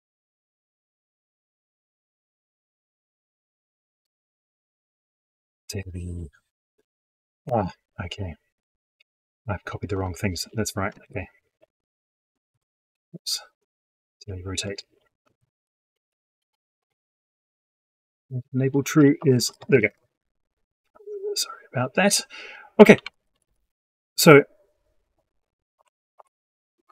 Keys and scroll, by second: 10.9 ctrl+shift+Left, 12.3 ctrl+shift+Right, 15.2 ctrl+shift+Left, 16.7 ctrl+Right.